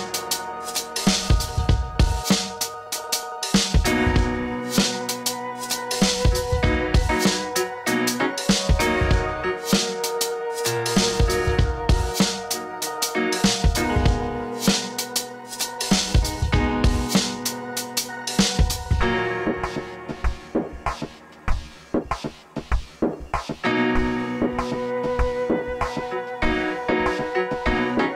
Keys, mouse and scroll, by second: 0.6 g, 1.0-2.7 drag, 4.4-6.2 drag, 8.5 v, 8.8-10.4 drag, 14.8 click, 20.5-21.7 drag, 24.1-25.9 drag, 26.9-28.1 drag.